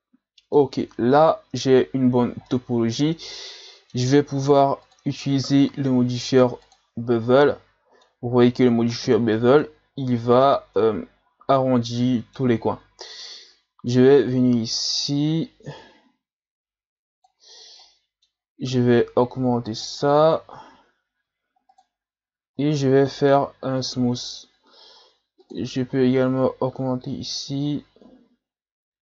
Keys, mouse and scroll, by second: 0.7 Tab, 1.6-2.0 scroll down 1, 2.2-2.5 scroll up 1, 2.5-4.8 middle drag, 4.8-7.4 drag, 7.4-9.9 middle drag, 9.9 scroll up 1, 10.1 Tab, 10.8-12.4 middle drag, 12.4 Tab, 13.0-14.3 middle drag, 14.3-17.3 drag, 17.8-19.7 middle drag, 19.7-21.2 drag, 21.2 w, 22.6-25.4 middle drag, 25.4-29.0 drag.